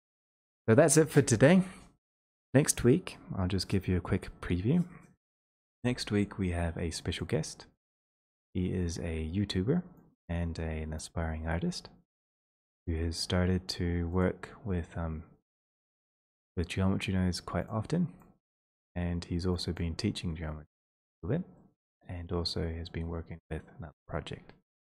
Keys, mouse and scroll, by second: 4.3 click, 7.7 click, 12.1 click, 12.1-12.9 scroll, 14.2 click, 15.9 click, 17.7 click, 18.6 click, 19.8 click, 20.1-20.8 scroll, 21.5-24.6 scroll.